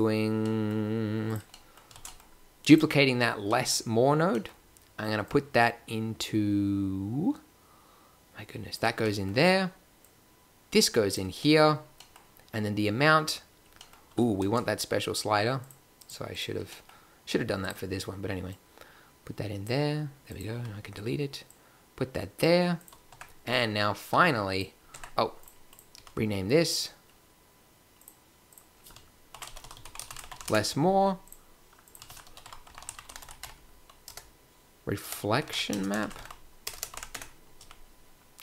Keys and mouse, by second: 1.3 click, 1.9 shift+d, 2.1 middle click, 7.0 drag, 9.1 middle click, 9.2-11.2 drag, 11.3 click, 14.3 shift+a, 16.4-17.9 drag, 20.1 click, 20.6 x, 21.7-22.4 drag, 23.1 click, 23.1 Tab, 24.9 Tab, 25.9 n, 29.7 s, 30.6-31.2 middle drag, 31.2-33.3 drag, 36.7 BackSpace, 37.5 n.